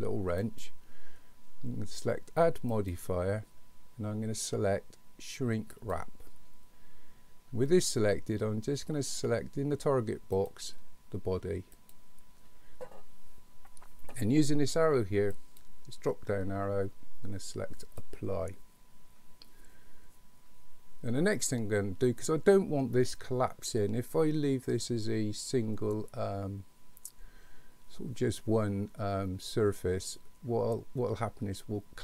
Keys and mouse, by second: 0.4 click, 2.8-6.0 drag, 10.5-12.0 drag, 15.5-18.0 drag.